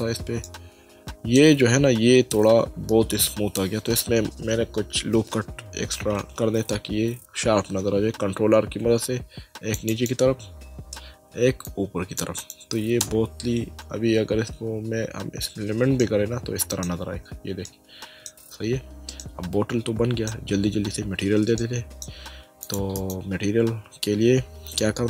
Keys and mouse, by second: 0.4 middle click, 6.1 Tab, 8.5 ctrl+r, 9.0 click, 11.1 ctrl+r, 11.6 click, 13.0 Tab, 16.0 middle click, 17.7 middle click, 19.2 middle click, 21.6 middle click, 22.9 right click.